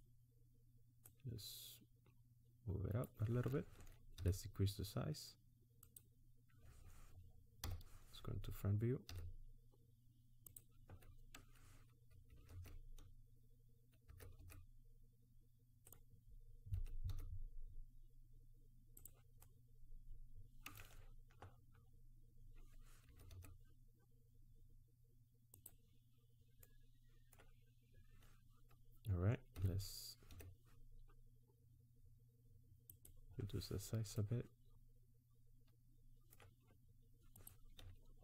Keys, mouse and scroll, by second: 1.0 click, 4.3 s, 7.6 KP_1, 9.1 s, 12.3 g, 16.8 g, 19.4 middle click, 21.8-22.2 scroll down 1, 23.0 g, 26.6 middle click, 29.6 s, 33.3-34.3 scroll up 6, 34.3 middle click, 37.4 click.